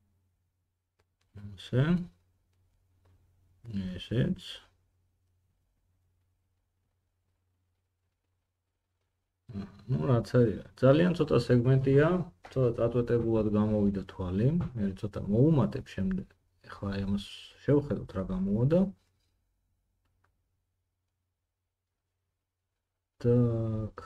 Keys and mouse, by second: 0.0 g, 2.0 g, 4.5 middle click, 4.7 g, 10.4 middle click, 14.4 middle click, 14.7-24.0 drag, 14.7 g.